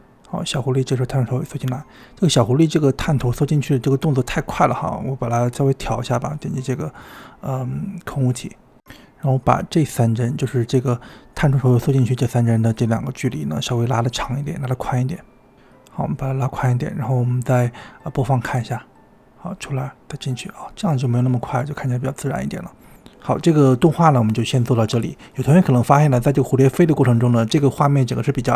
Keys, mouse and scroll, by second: 1.8 space, 2.6 space, 4.8 space, 6.7 click, 7.4-7.9 middle drag, 7.9-8.3 scroll up 1, 8.3 click, 8.9-10.5 drag, 14.1 click, 14.4 space, 14.6 space, 14.9-15.5 drag, 15.5 g, 16.4 click, 16.5 g, 17.5-18.4 drag, 18.4 space, 23.6 space, 24.3 space.